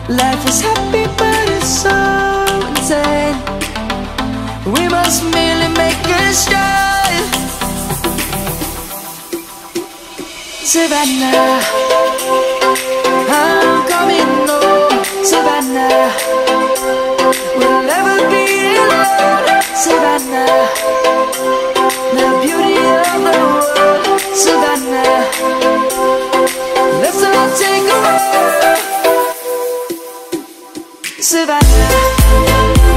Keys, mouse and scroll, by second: 0.5 click, 2.7 3, 5.7 right click, 8.4 click, 14.9 right click, 24.8 typing, 29.3 right click, 31.1-32.3 drag.